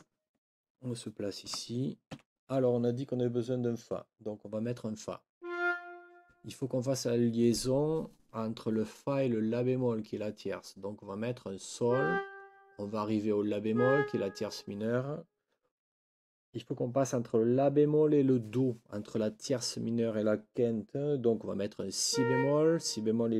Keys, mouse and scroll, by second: 1.4 n, 2.1 5.